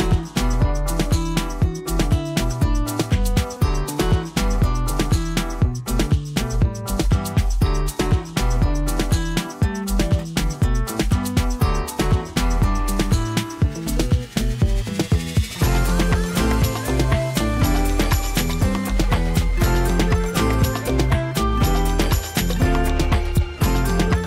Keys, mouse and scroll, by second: 0.0 w, 0.2 click, 3.8 ctrl+z, 4.7 shift+click, 6.2 ctrl+z, 6.8 shift+click, 10.6 shift+F6, 12.6 t, 13.5 click, 16.0 space, 16.2-24.1 ctrl+drag, 17.7-18.1 drag, 24.1 ctrl+d.